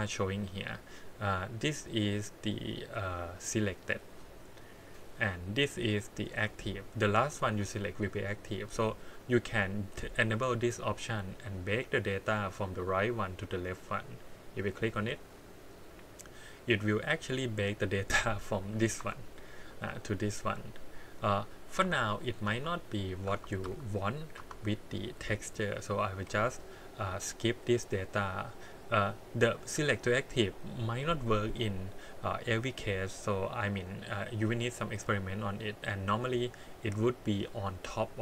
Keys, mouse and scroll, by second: 0.1 click, 3.2 click, 4.6 click, 5.7 click, 6.7 click, 9.2 click, 10.4 click, 14.3 click, 18.4 click, 19.0 g, 20.0 click, 21.8 Tab, 22.5 Tab, 23.3 Tab, 23.6 a, 24.3 Tab, 25.7 click, 26.3 x, 28.7 click, 29.9 click, 34.5 click, 34.9 click.